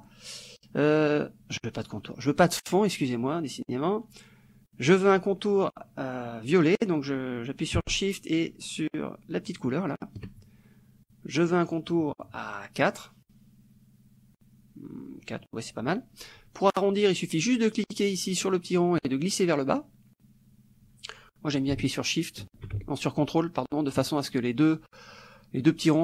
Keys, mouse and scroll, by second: 9.6 shift+click, 11.8 right click, 13.0 click, 18.8-24.1 drag.